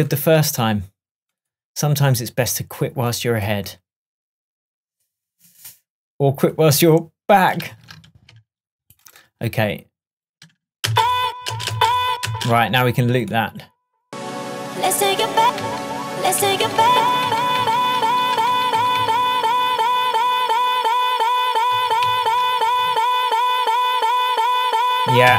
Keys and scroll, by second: 7.8 super+z, 10.9 space, 15.7 super+d, 22.9 shift+super+Tab.